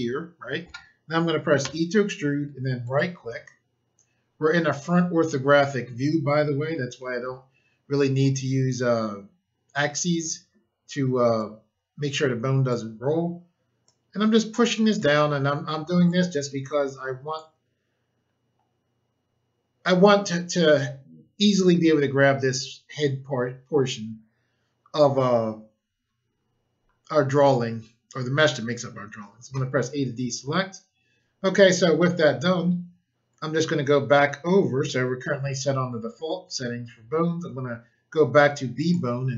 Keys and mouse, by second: 1.6 e, 2.8 right click, 11.3 click, 13.8 click, 16.0 click, 29.5 a, 38.7 click.